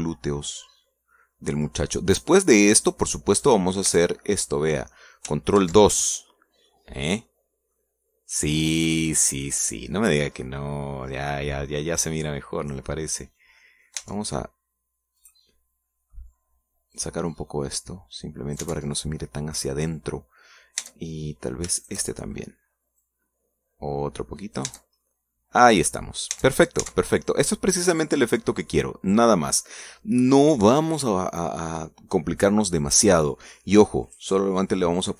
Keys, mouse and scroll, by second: 0.2-2.4 middle drag, 2.9-4.2 drag, 4.2 middle click, 5.0 Tab, 5.0 click, 5.4 click, 5.6 middle click, 6.7 ctrl+2, 7.4 middle click, 8.0 scroll down 2, 8.4 middle click, 9.0-9.5 scroll up 2, 9.5-10.9 middle drag, 10.9-11.5 scroll up 2, 11.5 middle click, 12.9 middle click, 13.7 scroll down 1, 14.0 middle click, 14.7 middle click, 15.1 Tab, 15.4-15.7 scroll up 1, 16.3 right click, 16.6 middle click, 18.0-19.9 drag, 19.9 Tab, 20.0 middle click, 21.0-22.0 scroll down 2, 22.0 Tab, 22.9 shift+right click, 23.3 shift+middle click, 24.2-25.9 drag, 25.8 Tab, 26.2 middle click, 26.4-27.6 drag, 27.4 Tab, 27.7 scroll down 1, 28.2-29.4 drag, 29.6 scroll up 1, 30.0 scroll down 1, 30.6 scroll down 1.